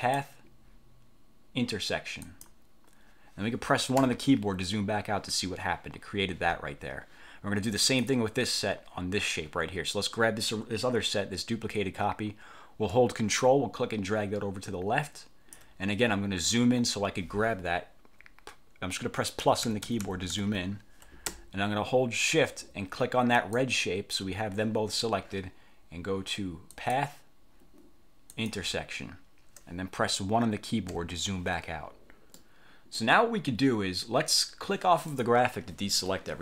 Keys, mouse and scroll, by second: 0.1 click, 2.4 click, 4.1 1, 8.0 click, 13.0-15.8 ctrl+drag, 19.6 =, 23.5 shift+click, 26.9 click, 28.4 click, 31.0 1, 32.5 middle click, 35.2 click.